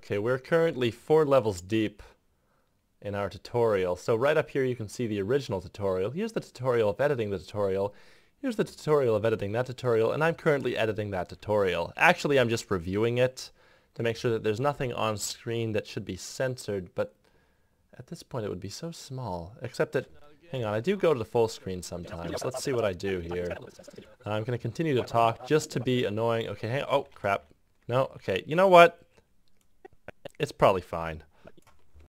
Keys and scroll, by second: 3.7 `, 7.4 `, 12.2 g, 14.2 `, 19.9-22.0 typing, 23.6-28.7 typing.